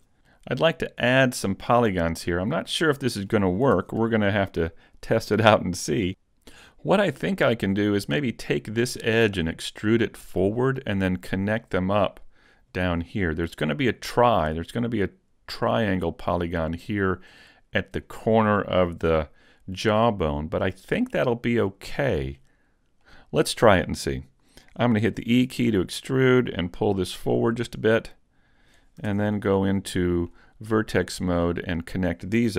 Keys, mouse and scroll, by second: 0.1 super+z, 0.4 middle click, 2.4 middle click, 3.8 ctrl+Tab, 4.9 right click, 5.4 middle click, 6.6 click, 8.2 right click, 9.0 middle click, 13.0 middle click, 20.0 middle click, 23.1 middle click, 25.4 e, 26.0 click, 27.2 click, 29.2 ctrl+Tab, 29.6-30.0 scroll up 2, 30.0 middle click, 31.0 right click, 31.8 shift+right click.